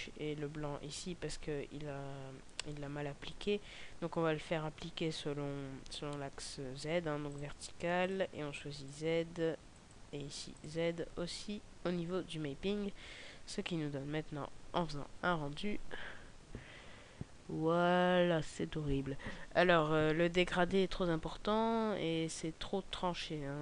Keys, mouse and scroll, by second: 0.8 Escape, 4.0 scroll down 2, 5.9 scroll down 1, 7.3 click, 12.8-14.4 scroll up 3.